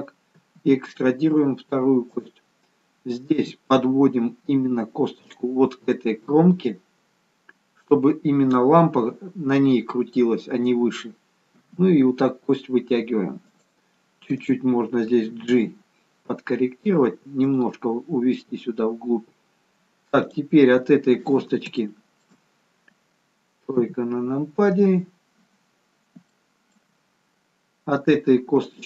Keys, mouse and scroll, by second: 0.5 e, 3.4 e, 11.7 e, 14.5 click, 15.7 g, 20.3 click, 20.8-21.7 scroll down 2, 21.8 shift+middle click, 23.9 KP_3, 25.3-26.3 scroll up 1, 26.3 scroll up 1, 26.4 shift+middle click, 27.1-28.2 scroll up 1, 28.6 click.